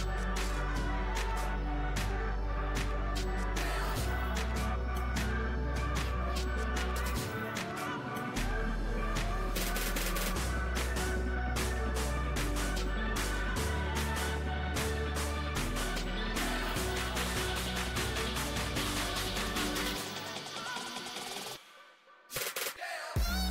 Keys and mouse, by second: 0.4 a, 0.6 a, 1.3 KP_Divide, 1.7 z, 3.1 s, 5.2 click, 5.3-7.6 typing, 9.4 alt+s, 11.2 z, 12.3 Tab, 13.8-16.1 drag, 17.4-20.8 drag.